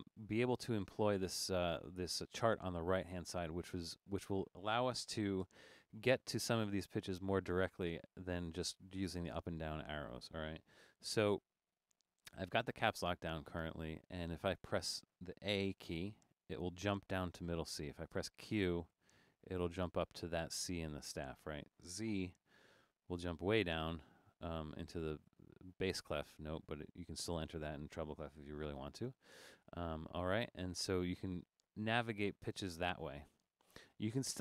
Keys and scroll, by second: 5.8 Caps_Lock, 16.3 a, 19.0 q, 22.8 shift+z, 29.1 a, 30.5-33.0 typing.